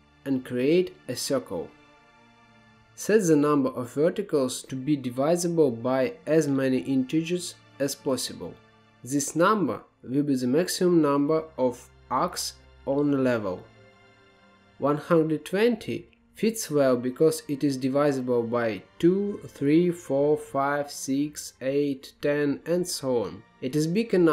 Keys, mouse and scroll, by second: 2.3-11.2 drag, 11.8-12.8 drag, 12.8 Tab, 13.5-14.0 scroll up 4, 14.0-15.3 middle drag, 15.3-16.5 scroll down 1.